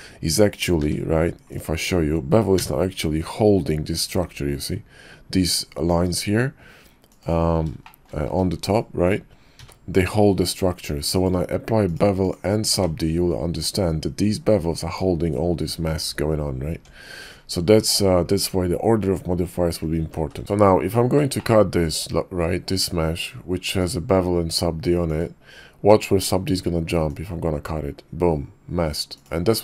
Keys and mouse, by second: 0.8 q, 7.8 shift+drag, 8.3 q, 11.8 click, 12.2 click, 13.2 Tab, 16.7 Tab, 20.0 ctrl+z, 20.2 ctrl+z, 20.4 ctrl+`, 23.7 click, 25.0 click, 27.1-29.3 drag.